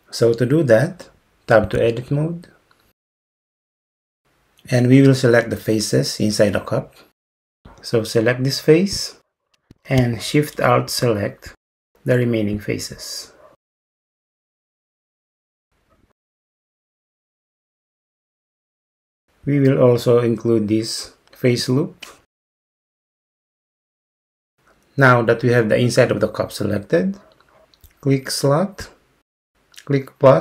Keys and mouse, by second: 1.8 Tab, 29.3-30.4 drag.